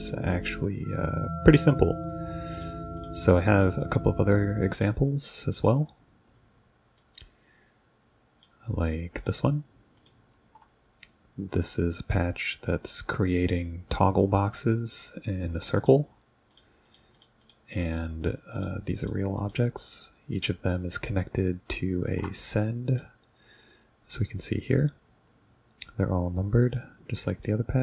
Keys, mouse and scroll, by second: 2.6 click, 3.0 click, 4.7 click, 7.0-8.4 drag, 9.2 click, 10.0 ctrl+click, 15.8 ctrl+click, 16.5 ctrl+click, 16.9 ctrl+click, 17.2 ctrl+click, 17.5 ctrl+click, 17.8 ctrl+click, 18.6 ctrl+click, 19.0 ctrl+click, 19.4 ctrl+click, 22.4 right click, 27.4-27.8 drag.